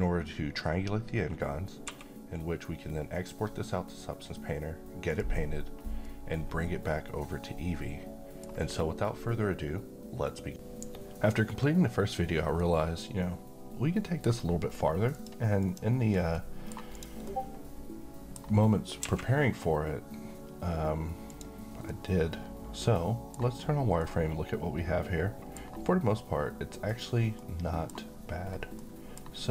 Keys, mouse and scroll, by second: 1.8 2, 5.2 click, 6.2-8.5 middle drag, 15.1 click, 16.3-17.2 middle click, 16.9 click, 17.8-18.4 middle click, 19.0 q, 21.3 click, 21.9-23.5 middle drag, 28.5 scroll down 1, 28.8-29.4 middle drag.